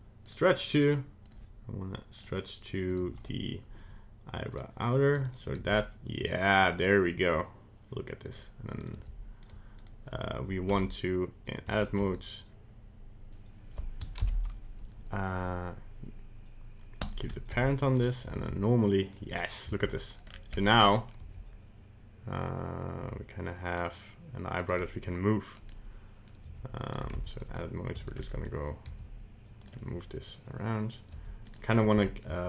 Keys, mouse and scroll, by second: 1.2 click, 2.9 click, 5.3 right click, 5.5 g, 8.8 right click, 8.9 g, 9.8 right click, 10.7 Tab, 11.7 shift+right click, 14.5 ctrl+p, 17.8 Tab, 17.9 right click, 18.2 g, 19.5 right click, 19.6 g, 20.2 scroll down 3, 20.5 middle click, 21.2 g, 24.8 middle click, 25.7 middle click, 26.4 g, 27.1 Tab, 28.0 shift+right click, 28.2 middle click, 28.8 g, 29.8 middle click, 31.1 g, 31.7-32.0 scroll up 2, 32.0 shift+middle click.